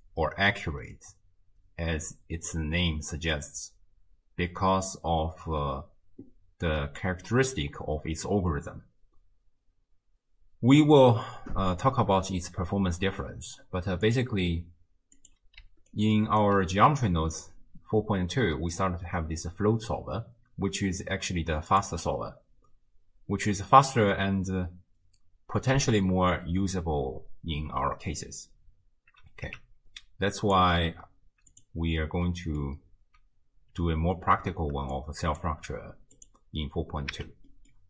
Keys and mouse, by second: 14.1-15.3 drag, 15.6 d, 15.9 click, 16.5 d, 18.0 d, 21.7 click, 29.5 x, 31.5 click, 32.3-32.7 middle drag, 35.0 click, 36.2 click, 37.1 x, 37.5 middle click.